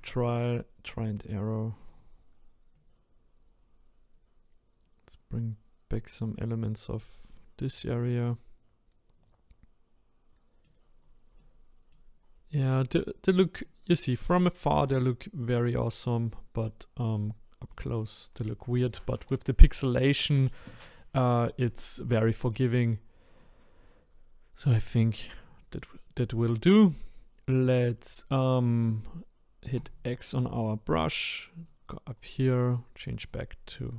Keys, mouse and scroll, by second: 2.7-5.8 drag, 7.8-11.0 middle drag, 11.0-11.4 scroll down 1, 11.4 middle click, 12.2 scroll down 1, 12.5-13.9 middle drag, 13.9-14.2 scroll down 1, 14.2-17.1 middle drag, 17.1-17.7 scroll up 1, 17.7-21.2 middle drag, 22.6 click, 23.0-23.4 scroll down 1, 23.4-29.8 middle drag, 29.8-33.9 drag.